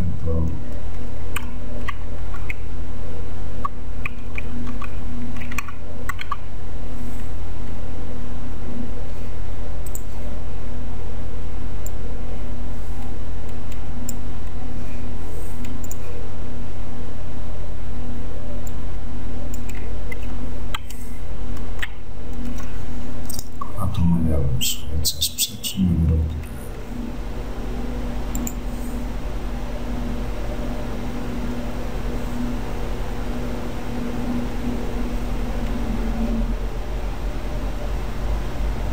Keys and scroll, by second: 1.5 alt+BackSpace.